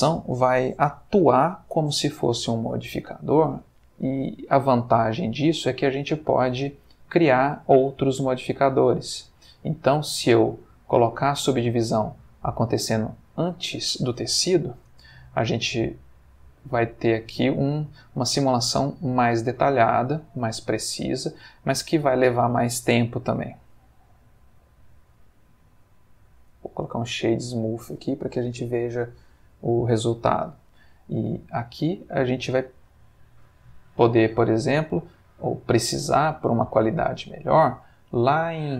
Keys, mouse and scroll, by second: 5.2 click, 6.4 click, 10.1-11.6 drag, 14.9 space, 25.5 right click, 26.5 click, 32.8 Escape, 34.7 click, 35.9-36.6 middle drag, 36.7 middle click, 37.4 middle click, 38.1 middle click.